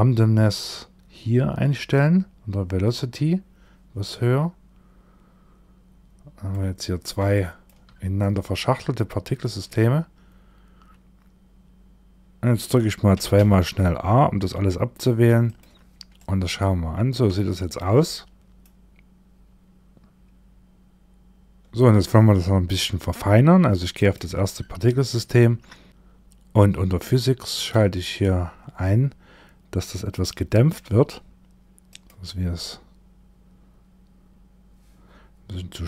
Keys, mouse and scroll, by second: 0.0 click, 5.1 click, 6.8 shift+middle click, 7.2 shift+scroll up 1, 7.4-9.2 scroll down 3, 7.7 middle click, 12.6 a, 12.8 a, 14.9 click, 15.6 middle click, 16.3-16.8 scroll up 2, 16.7 shift+middle click, 17.5 middle click, 23.5 click, 23.9-24.4 scroll down 1, 24.4-25.5 scroll down 12, 25.5-26.2 scroll down 24, 25.9-26.2 scroll up 10, 27.0 click, 28.3 scroll down 1, 29.3 click, 31.3 click, 35.2 click.